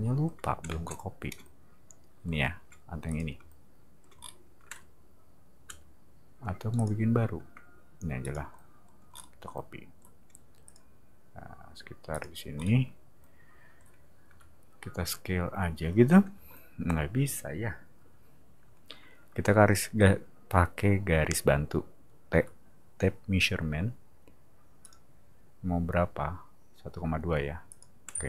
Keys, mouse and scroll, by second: 0.6 space, 0.9 click, 3.0 click, 4.2 middle click, 5.6 m, 6.8 click, 8.2 click, 9.1 middle click, 10.6 click, 12.1 click, 12.5 middle click, 14.3 s, 16.3 space, 24.8 click, 27.7 click, 28.1 space.